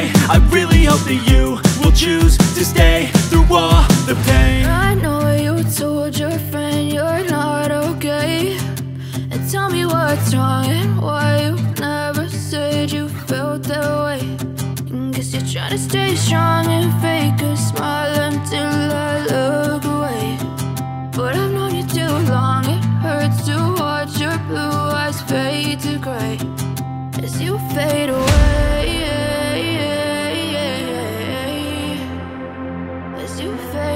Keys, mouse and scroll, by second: 13.2 shift+click.